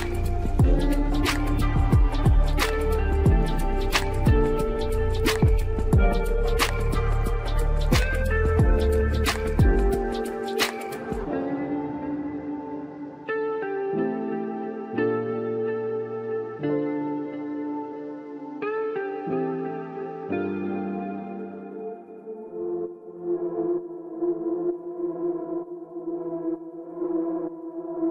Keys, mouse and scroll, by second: 7.2-8.9 right drag, 8.9-9.3 scroll down 2, 9.8 Tab, 10.6 Tab, 11.2 click, 11.7 middle click, 12.4 scroll up 3, 13.1 shift+middle click, 13.7-14.0 shift+scroll up 1, 14.0-16.3 middle drag, 16.3 scroll up 1, 20.1-20.8 drag, 20.8-21.2 scroll down 4, 21.5-24.6 middle drag, 26.6-28.1 middle drag.